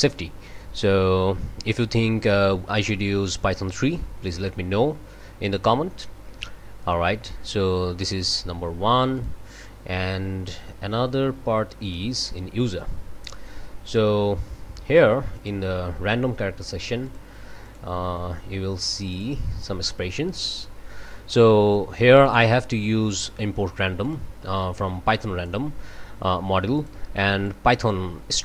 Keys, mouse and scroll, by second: 5.2 scroll down 2, 6.0 scroll up 2, 6.7-8.2 scroll up 5, 9.1 click, 11.8 click, 12.9 scroll down 2, 15.4 right click, 16.6 click, 17.0 click, 17.7 right click, 19.1 click, 20.1-21.0 scroll down 4, 22.2 click, 23.1 click, 24.0 click, 24.6 click, 26.7 click, 27.4-28.4 drag.